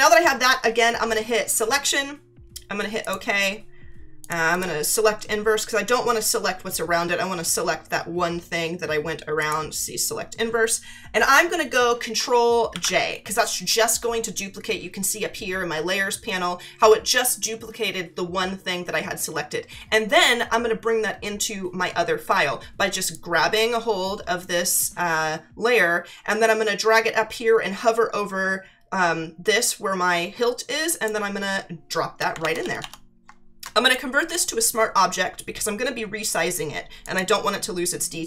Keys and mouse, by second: 1.4 click, 3.0 click, 4.2 click, 4.5 right click, 9.4 click, 12.7 ctrl+j, 23.1 click, 33.8 right click, 37.0 right click.